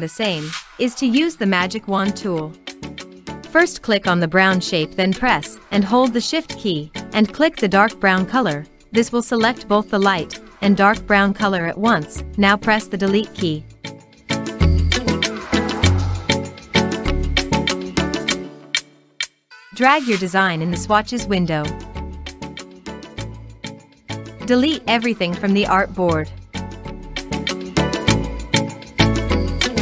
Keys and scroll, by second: 11.3 Delete, 25.3 Delete, 28.3 Delete.